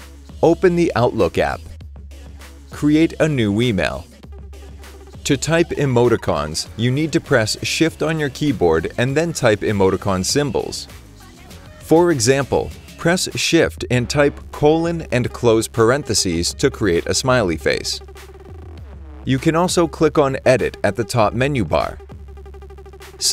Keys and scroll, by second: 14.2 shift+;, 16.6 shift+;, 16.9 shift+9.